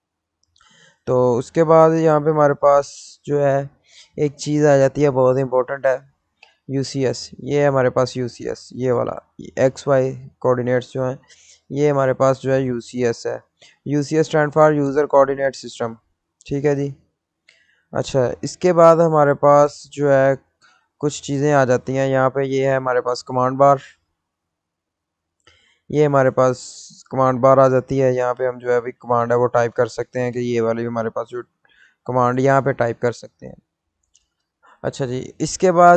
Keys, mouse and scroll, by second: 7.2 middle click, 8.4 click, 9.6-11.9 scroll up 1, 14.2 F1, 16.9-21.3 middle drag, 21.3 click, 25.8 click, 28.9 click, 29.3-31.0 typing, 31.9 click, 35.0 click.